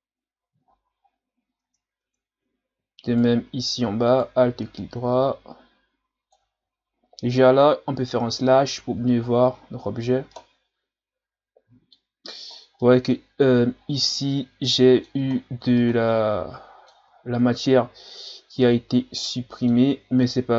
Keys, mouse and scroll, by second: 0.6 scroll down 1, 1.0 scroll up 4, 1.6 Tab, 2.0 Tab, 3.1 right click, 3.4 Tab, 4.1 alt+right click, 4.8-6.6 drag, 6.6 ctrl+z, 8.2 KP_Divide, 9.3 scroll down 3, 9.5-10.3 scroll up 6, 10.3-12.5 middle drag, 12.5 scroll down 3, 12.8 middle click, 13.4-14.2 scroll up 7, 14.2-15.3 middle drag, 15.3-15.7 scroll down 2, 15.7-17.0 middle drag, 17.0 scroll up 1, 17.2-18.6 scroll down 4, 18.6-20.5 middle drag.